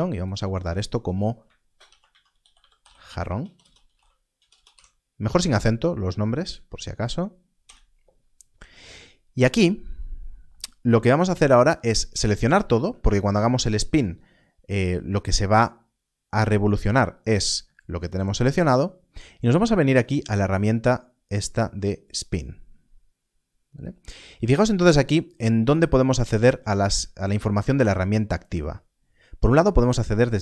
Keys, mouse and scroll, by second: 1.8-4.4 typing, 6.3 Return, 7.5 Return, 9.1 scroll up 1, 11.2 scroll down 1, 12.0 scroll, 22.1 click, 30.1 click.